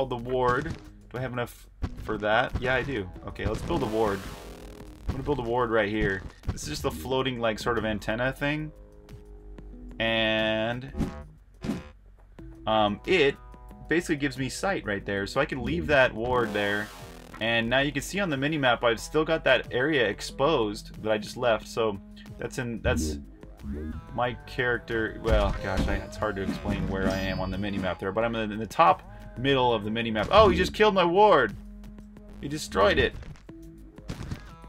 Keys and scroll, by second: 0.0-0.4 typing, 1.9-16.9 typing, 18.7-22.3 typing, 23.5-25.2 typing, 26.4-27.3 typing, 28.5-34.6 typing.